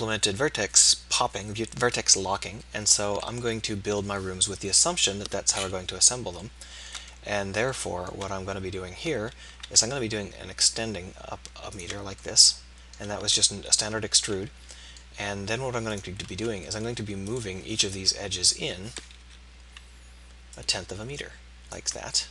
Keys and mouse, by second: 4.7 KP_3, 9.7 e, 13.6 KP_7, 16.0-18.4 middle drag, 18.4 KP_3, 19.3 KP_7.